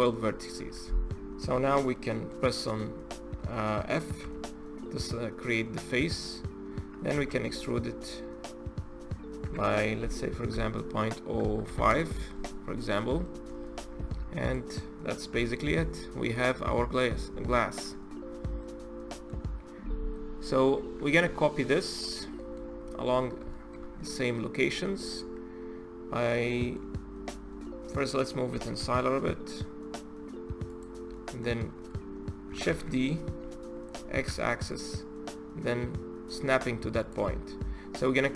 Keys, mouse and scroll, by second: 0.5 Tab, 1.4 Tab, 1.8-4.0 middle drag, 4.0 f, 4.8-7.0 middle drag, 7.0 e, 12.6-13.0 scroll up 2, 13.0 middle click, 13.8 Tab, 14.2 click, 15.1 KP_Divide, 16.1 click, 17.5 shift+click, 17.9-18.4 scroll down 1, 18.4-22.6 middle drag, 22.6-23.3 scroll down 6, 23.3-23.6 shift+middle drag, 23.6-24.1 scroll up 4, 24.1-24.6 middle drag, 24.6-26.0 scroll up 2, 26.0-28.3 middle drag, 28.3 g, 30.9-32.5 middle drag, 32.5 shift+d, 37.3-38.0 scroll down 3, 38.0-38.3 middle drag.